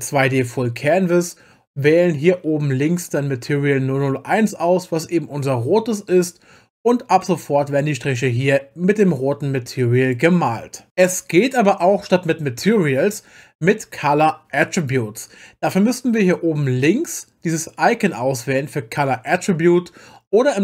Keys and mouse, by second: 7.3 click.